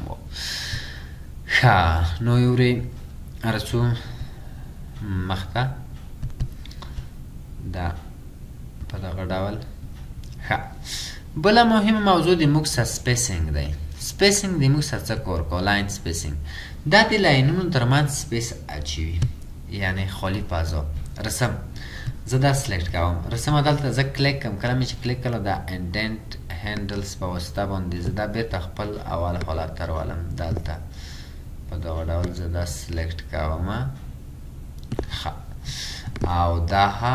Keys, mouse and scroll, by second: 1.0-1.4 ctrl+scroll up 1, 20.6-21.4 ctrl+scroll down 2.